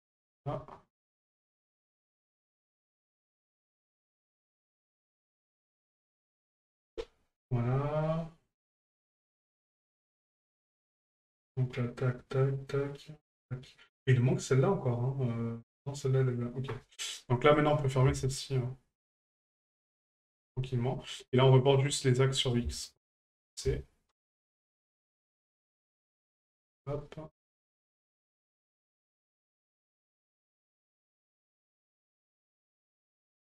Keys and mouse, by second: 0.0 right click, 1.4 ctrl+click, 3.9 right click, 5.3 ctrl+click, 17.6 right click, 19.0 shift+right click, 21.4 right click, 22.4-23.6 drag, 25.6 click, 27.5 right click, 28.4-29.6 ctrl+drag, 31.3 ctrl+click, 32.9 right click.